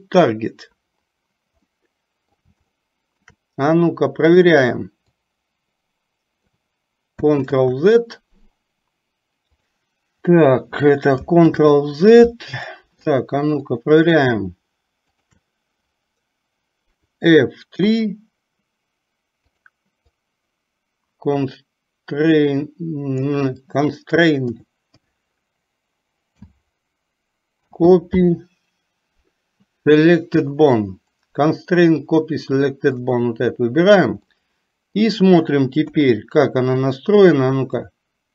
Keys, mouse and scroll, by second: 1.8 middle click, 2.9 shift+middle click, 4.4 click, 5.3-6.6 drag, 11.7 ctrl+z, 12.8 middle click, 13.7 click, 15.2 shift+click, 34.4 middle click, 35.9 KP_3, 36.8 click, 38.1-38.3 drag.